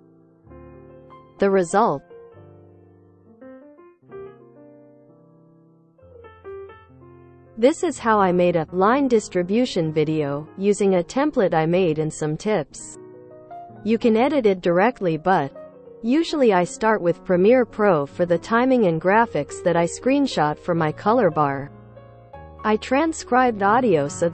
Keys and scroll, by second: 8.5 space.